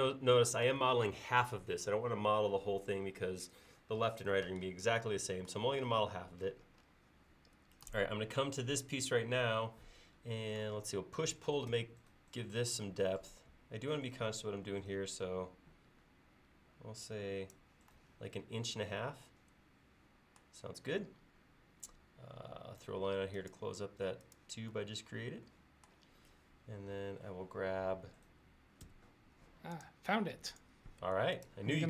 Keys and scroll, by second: 11.7 p, 28.9 space, 30.2-30.7 typing.